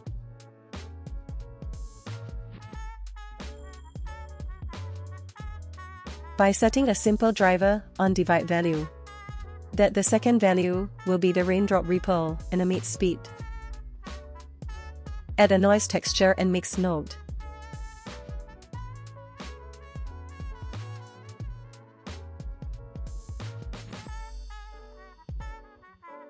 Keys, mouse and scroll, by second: 3.0 click, 3.2 shift+d, 3.9-4.4 drag, 4.5 middle click, 4.6-5.1 drag, 5.2 middle click, 8.1-12.4 drag, 12.4 middle click, 13.6 click, 15.1 shift+a, 22.1 shift+a.